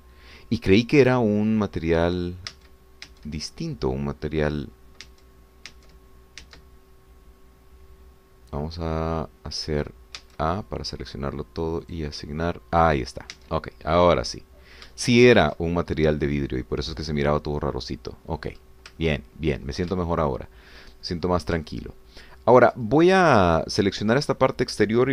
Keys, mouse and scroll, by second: 0.2-1.6 middle drag, 3.6 Tab, 6.1 Tab, 7.5 Tab, 11.2 a, 12.8 click, 14.3 Tab, 14.9-16.0 middle drag, 16.0 shift+middle click, 17.0 shift+middle click, 18.7-19.7 middle drag, 20.0 ctrl+middle click, 21.0 ctrl+shift+middle click, 22.3 ctrl+shift+middle click, 23.9 ctrl+scroll down 1, 24.2-25.1 ctrl+drag.